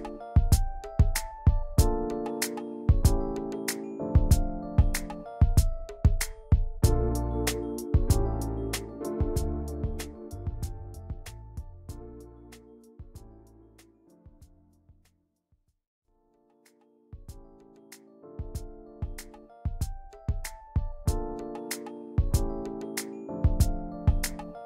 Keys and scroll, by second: 8.6 z, 9.3 v, 10.2 p, 12.2 ctrl+z, 16.2 v.